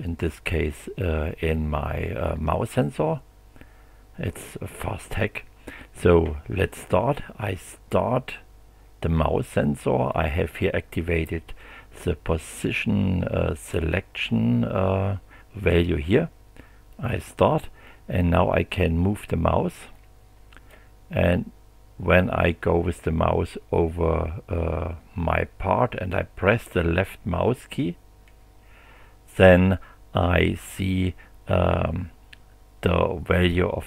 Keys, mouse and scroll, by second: 10.1 click, 16.9 click, 19.9 click, 26.6-33.8 drag.